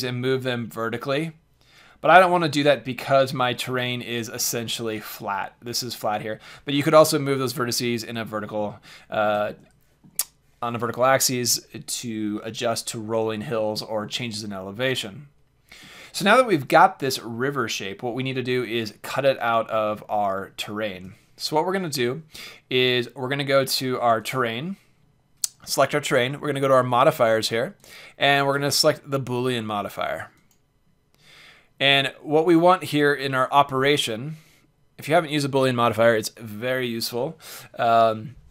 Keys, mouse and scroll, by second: 0.2-1.2 drag, 3.0 Tab, 3.6 z, 4.0 middle click, 5.6-6.2 middle drag, 6.2 drag, 6.4 middle drag, 6.5 middle click, 7.8-11.0 middle drag, 14.9-16.1 middle drag, 19.1-22.3 middle drag, 24.2-25.9 drag, 27.7-29.4 drag.